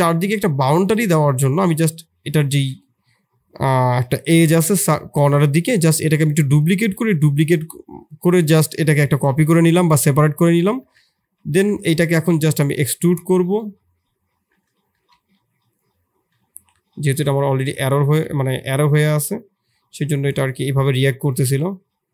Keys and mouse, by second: 0.4 2, 1.4 shift+click, 2.6 shift+d, 4.3 p, 6.0 Tab, 6.5-7.3 drag, 10.8 Tab, 11.1 a, 11.8 e, 13.5 middle click, 14.3 Tab, 14.9 g, 18.0 g, 19.9 s, 20.8 Escape.